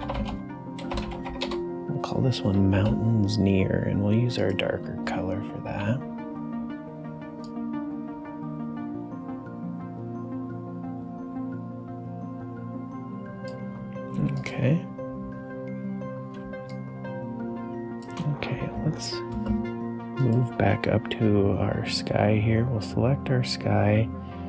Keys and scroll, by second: 0.0-1.7 typing, 5.6 b, 14.1 g, 16.4 space, 23.6 space.